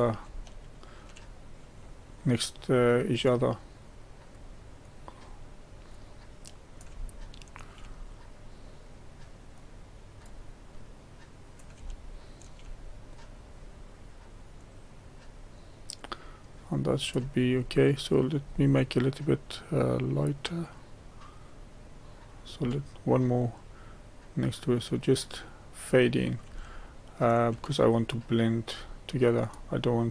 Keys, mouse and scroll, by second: 0.3-1.3 shift+middle drag, 1.3-7.1 drag, 7.1 shift+middle click, 8.0-11.9 drag, 11.9 shift+middle click, 12.8-15.8 drag, 20.2-24.1 drag, 25.5-27.8 middle drag, 27.8-30.1 drag.